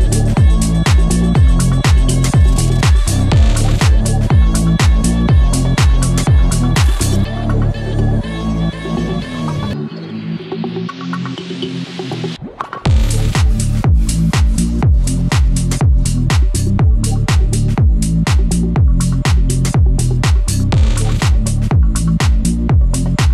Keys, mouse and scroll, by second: 0.6-3.7 drag, 3.7-6.1 drag, 6.1 right click, 6.4-7.2 scroll up 1, 7.2-10.7 drag, 10.7 Up, 18.5 click, 18.9-19.8 scroll down 1, 20.4 scroll down 1, 20.8 scroll up 1, 22.7 right click.